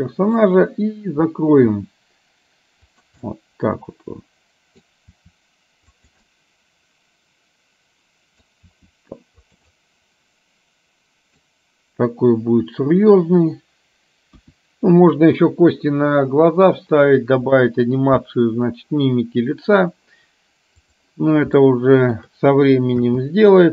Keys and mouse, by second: 1.8 r, 3.3-4.9 middle drag, 5.3 r, 6.3-8.6 middle drag, 8.8 r, 9.8-11.6 middle drag, 14.4 KP_1, 21.7 shift+middle click, 23.1 space.